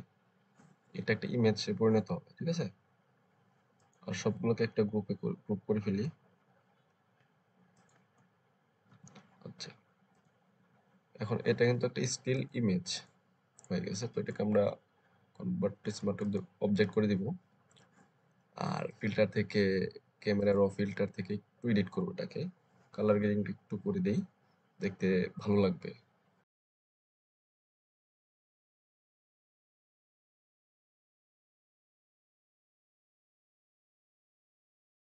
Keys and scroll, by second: 8.8 ctrl+shift+g, 30.5 Up, 31.9 Down.